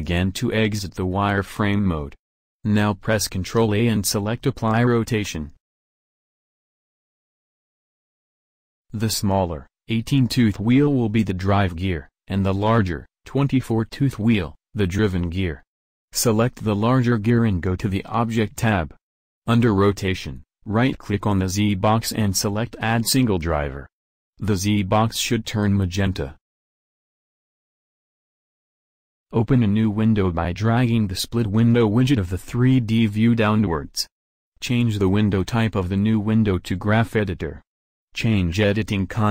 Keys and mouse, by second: 1.4 middle click, 2.8 z, 5.6 ctrl+a, 9.1-25.7 drag, 32.7-34.9 drag, 37.8-39.3 drag.